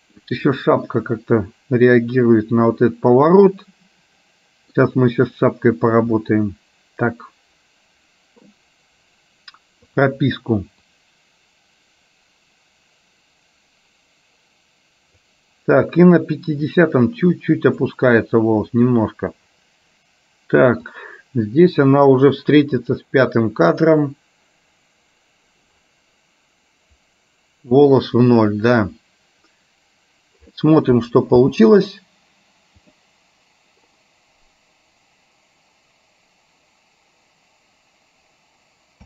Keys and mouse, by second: 1.0-4.8 middle drag, 10.0 click, 11.1-15.3 drag, 16.8-17.8 drag, 21.1 click, 23.0 click, 31.6 space.